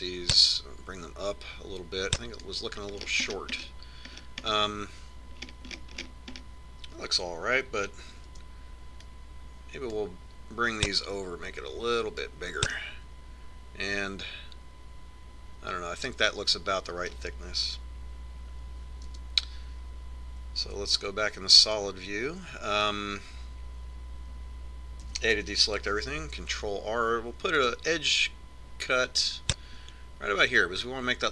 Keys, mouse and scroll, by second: 2.0-3.8 drag, 4.6-9.9 middle drag, 9.4 a, 10.0 b, 12.7-14.3 drag, 14.4-16.3 middle drag, 20.8 KP_1, 22.4 z, 26.8 a, 27.7 ctrl+r.